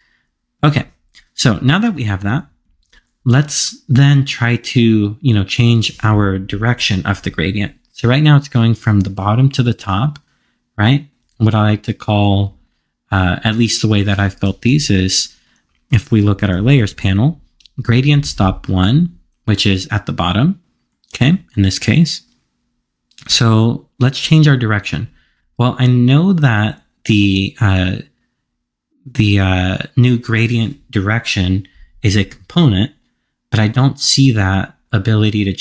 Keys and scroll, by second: 16.4 alt+l, 17.9 alt+l.